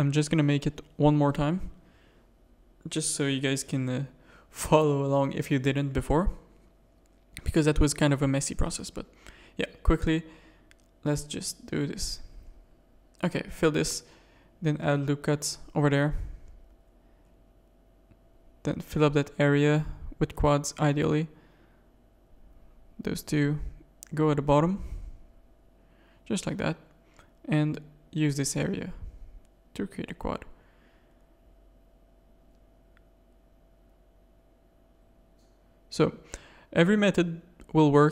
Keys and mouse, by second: 0.1 ctrl+z, 0.2 ctrl+z, 0.4 ctrl+z, 0.6 ctrl+z, 0.8 ctrl+z, 1.0 ctrl+z, 1.2 ctrl+z, 1.3 ctrl+z, 1.5 ctrl+z, 2.7 shift+middle click, 4.2 Tab, 4.7 Tab, 5.0 z, 5.2 a, 6.0 KP_3, 7.7 click, 9.5 a, 10.2 middle click, 11.0 middle click, 11.4-12.4 shift+middle drag, 13.3 f, 13.5 a, 13.9 ctrl+r, 16.3 middle click, 17.2 middle click, 18.9 f, 19.3 a, 19.8 click, 22.2-23.3 middle drag, 25.3 shift+click, 25.7 f, 26.0 a, 26.3 middle click, 27.7 f, 28.6 a, 29.5 f, 29.8 Tab, 30.2 z, 30.5 middle click, 32.2 KP_3, 32.5 Tab, 33.0 shift+middle click, 34.4 Tab, 34.6 click, 34.8 Tab, 35.4 click, 35.7 g.